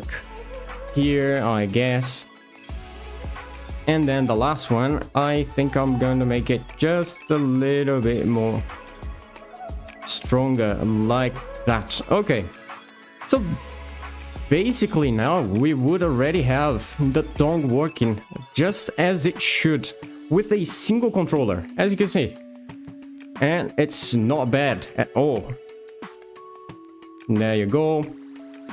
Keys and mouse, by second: 1.9 shift+middle drag, 5.5-8.2 shift+drag, 11.1 middle drag, 14.4 alt+r, 14.7 alt+g, 15.9 r, 18.2 click, 19.2 z, 20.3 r, 27.8 middle click, 28.6 r.